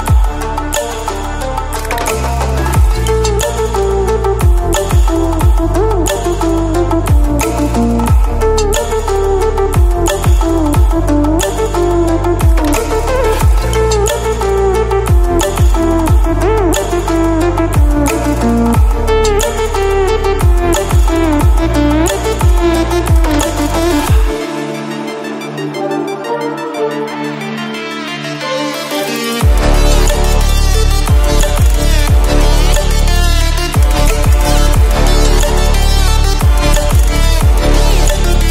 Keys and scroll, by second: 30.7 ctrl+-, 31.8 ctrl+-, 32.2 ctrl+-.